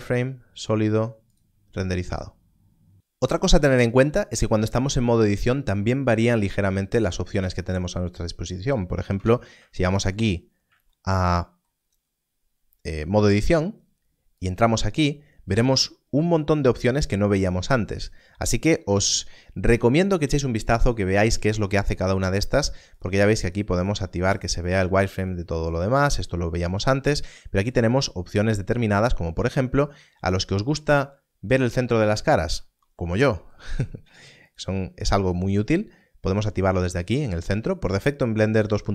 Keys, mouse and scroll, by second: 0.0 click, 0.5 click, 6.9 click, 9.1 click, 10.1 scroll up 1, 14.3 click, 22.9 click, 31.6 click, 32.7 scroll up 1, 34.4 click, 37.0 click.